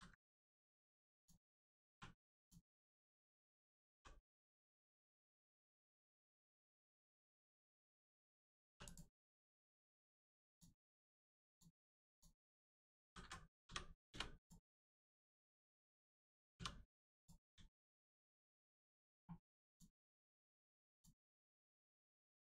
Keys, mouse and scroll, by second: 0.2 middle click, 1.1 click, 1.8 1, 2.3 click, 3.4 middle click, 5.4 ctrl+click, 5.7 middle click, 7.4 shift+middle click, 8.6 3, 8.8 click, 10.4 shift+click, 11.4 shift+click, 12.1 shift+click, 13.0 s, 13.1 x, 13.6 0, 14.0 Return, 14.3 click, 14.7 middle click, 15.3 shift+middle click, 15.6 scroll up 1, 16.5 2, 17.1 click, 17.6 shift+click, 19.6 shift+click, 20.9 shift+click, 21.3 x.